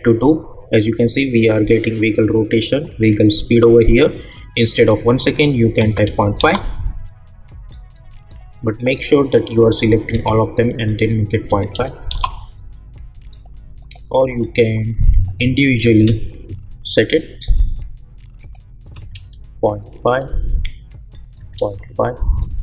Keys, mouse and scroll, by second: 4.7 click, 6.4 Return, 8.3 click, 10.1 ctrl+a, 10.7 click, 12.1 Return, 13.3 click.